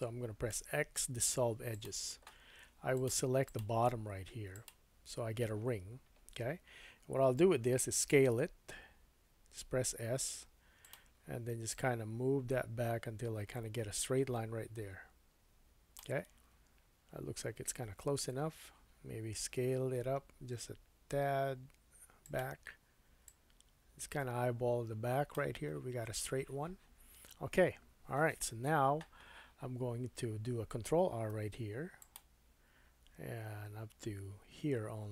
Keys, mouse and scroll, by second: 0.5 x, 2.9 click, 3.4 alt+click, 4.5 alt+click, 7.9 s, 8.1-11.7 middle drag, 11.7-13.9 drag, 19.7 s, 21.3-22.3 drag, 22.3 middle click, 23.3-35.1 drag, 31.3 ctrl+r.